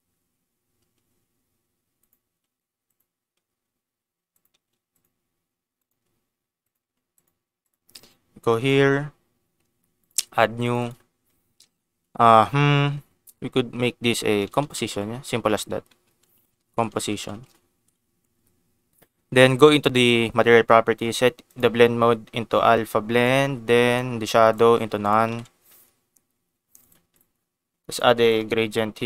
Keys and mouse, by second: 0.7 s, 0.8 x, 1.9 click, 2.2 g, 2.8 click, 3.3 s, 4.3 click, 4.4-7.2 typing, 4.9 click, 5.7 click, 6.6 click, 7.1 click, 7.6 click, 8.6 click, 10.0 click, 10.6 click, 11.3-18.3 shift+drag, 12.1 BackSpace, 15.4 BackSpace, 15.6 BackSpace, 15.9 BackSpace, 17.0 i, 17.7 ctrl+s, 21.5-23.4 drag, 23.9 click, 25.0 click, 25.3 ctrl+s, 26.7 click, 27.1 click, 27.8 click, 28.0 shift+a.